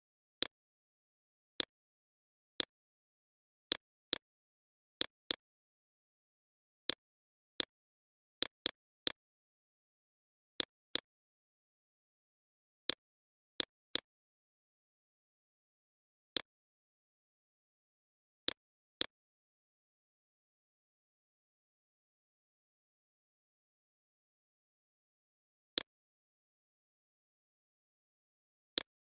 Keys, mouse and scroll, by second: 3.0 right click, 3.9-12.1 drag, 16.2 right click, 16.6 click, 17.1 right click, 17.7-28.7 drag, 28.7 right click.